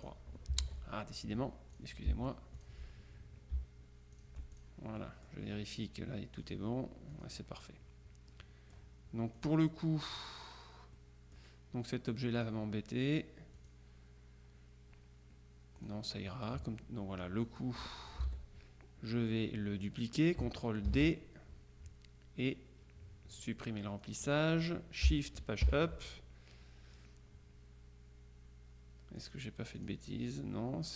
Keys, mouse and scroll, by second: 0.1 shift+click, 0.7 ctrl+z, 1.3 ctrl+click, 2.7 shift+click, 4.2 shift+click, 6.5 click, 7.2 click, 8.4 click, 9.4 click, 10.2 click, 11.1 click, 12.5 click, 13.7 click, 15.9 click, 17.7-18.7 drag, 18.4 ctrl+z, 20.9 ctrl+d, 24.1 click, 25.7 shift+Page_Up, 29.3-30.4 drag.